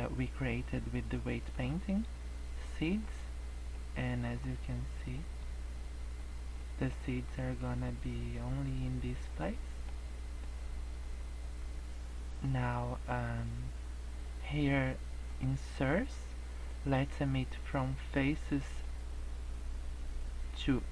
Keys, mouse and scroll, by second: 1.6 click, 3.7 middle click, 4.2 scroll down 5, 4.4 middle click, 4.8 scroll up 4, 5.2 middle click, 6.1 middle click, 7.0 scroll down 2, 7.1 middle click, 7.6 scroll up 1, 9.4 scroll down 1, 9.5 middle click, 10.4-12.5 scroll up 17, 12.9-13.6 scroll up 3, 13.6-15.3 scroll down 4, 15.3 click, 15.7 click, 18.7 click.